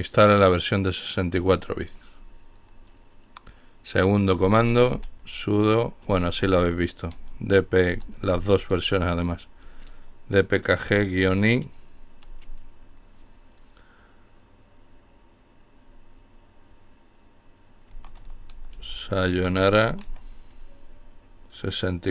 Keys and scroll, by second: 3.7-7.9 typing, 9.8-10.3 typing, 16.9-19.6 typing.